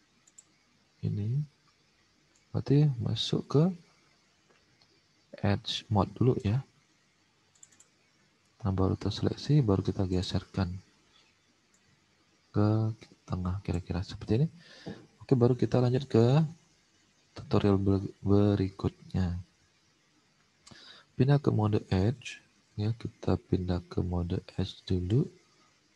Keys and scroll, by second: 14.3 alt+Tab, 15.5 alt+Tab, 22.6 alt+Tab.